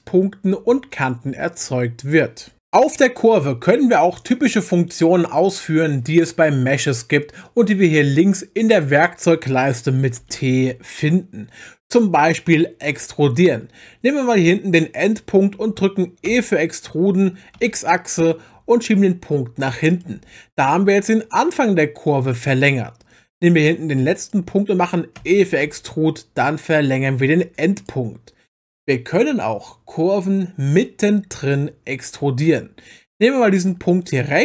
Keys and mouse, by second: 10.2 t, 10.6 t, 14.4 click, 16.3 e, 17.6 x, 24.2 click, 25.2 e, 25.6 x, 27.8 click, 33.5 click.